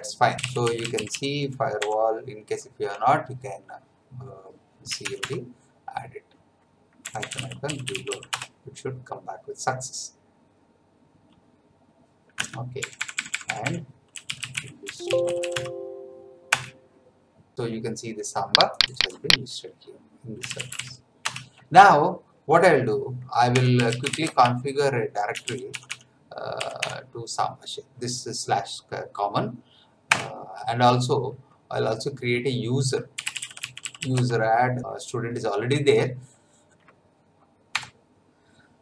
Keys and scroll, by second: 0.1-1.8 typing, 4.6-5.5 typing, 6.8-8.6 typing, 12.4 Up, 12.8 BackSpace, 13.9-15.7 typing, 16.5 Return, 20.1-21.2 typing, 23.2-27.2 typing, 30.1 Return, 32.8-34.3 typing, 37.8 F9.